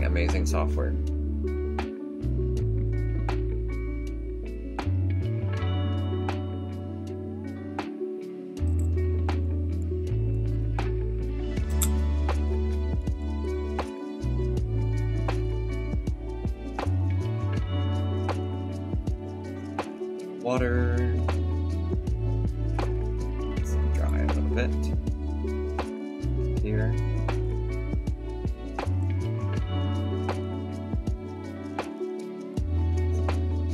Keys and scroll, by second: 8.6 5, 11.6 4.